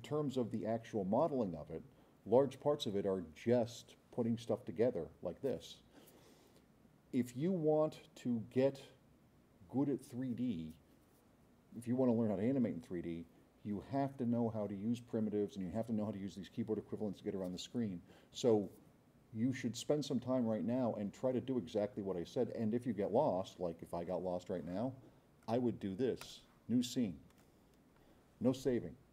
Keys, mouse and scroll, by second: 25.4 click, 26.2 click, 27.3 click.